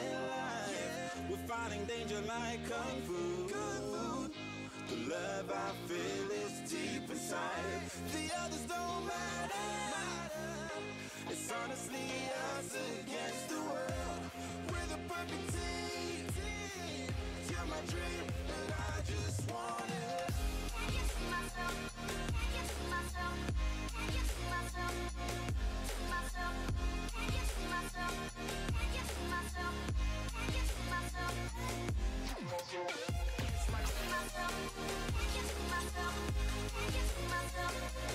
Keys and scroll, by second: 17.3 super+Down, 22.9 Down, 23.6 Right, 26.3 alt+super+BackSpace, 28.2 Down, 28.9 Right, 30.0 alt+BackSpace, 31.1 alt+Down, 31.5 Right, 32.4 alt+BackSpace, 33.1 alt+Down, 33.6 Right, 34.3 alt+BackSpace, 35.1 alt+Down, 35.4 Right, 36.1 alt+BackSpace, 36.6 alt+Down, 37.1 Right, 37.7 alt+BackSpace.